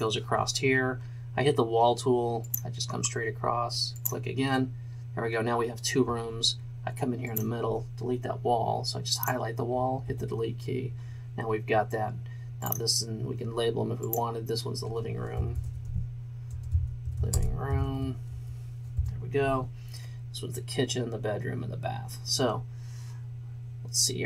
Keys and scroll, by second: 10.1 Delete, 15.5-17.8 typing, 19.0 r, 19.0 o.